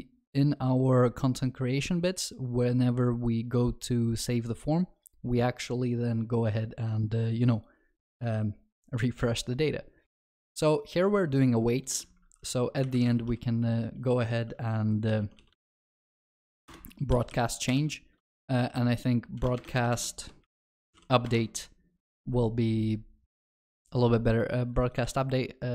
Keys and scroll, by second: 16.7 Return, 17.7 ctrl+b, 25.1 ctrl+c.